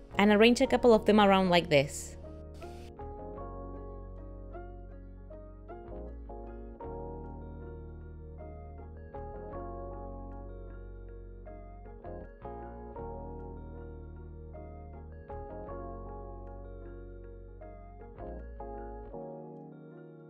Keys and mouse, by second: 1.1 r, 2.8 shift+d, 3.2 r, 5.8 shift+d, 7.0 click, 7.0-9.5 typing, 7.4 click, 7.8 click, 8.7 click, 10.9-12.6 typing, 12.4 click, 14.6 click, 16.0 click, 16.3 g, 17.0 click, 17.3 g, 18.4 click, 18.6 click, 18.7 z.